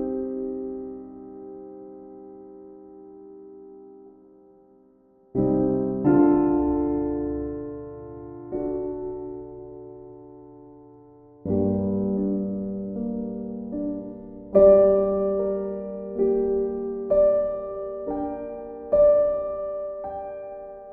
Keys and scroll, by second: 19.3 b.